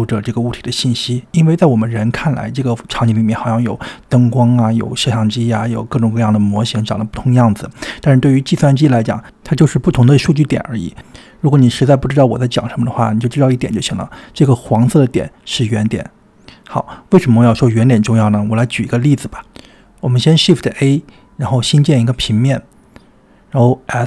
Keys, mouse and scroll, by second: 0.3 click, 0.5 shift+c, 0.9-1.3 scroll up 3, 1.3 shift+middle click, 1.7 click, 2.3 drag, 2.8 click, 3.4 click, 9.4 click, 19.9 click, 20.2 middle drag, 20.4 middle click, 21.0 click, 21.1 middle click, 21.7 shift+s, 22.1 shift+a.